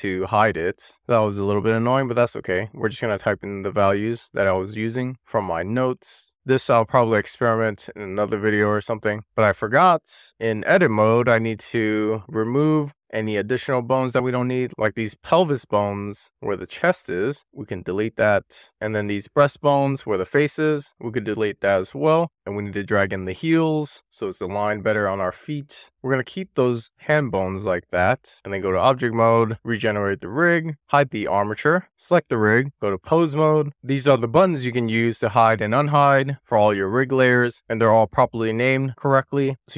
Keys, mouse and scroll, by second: 0.1 click, 0.7 middle click, 1.7-4.1 drag, 4.5 shift+middle click, 4.8 click, 5.7 middle click, 6.0 scroll up 1, 6.2 click, 8.1-9.8 drag, 10.2-10.8 scroll down 1, 10.8-11.8 scroll up 2, 11.8 click, 13.1 click, 13.7 middle click, 14.6 click, 15.2 x, 16.5 click, 16.8 x, 17.9 click, 18.1 middle click, 18.6 click, 18.9 click, 19.6 x, 20.7 click, 21.2 click, 22.2 super+z, 22.7 click, 23.2 scroll up 1, 23.3 middle click, 23.6 click, 23.8 middle click, 24.2 click, 24.4 middle click, 25.2 scroll down 2, 25.4 shift+middle click, 26.3 shift+middle click, 26.8-27.6 shift+scroll down 3, 27.6 middle click, 28.0 scroll up 1, 28.3 Tab, 30.0 click, 31.1 click, 31.8-32.4 scroll down 1, 32.4 click, 32.8 click, 36.9 click.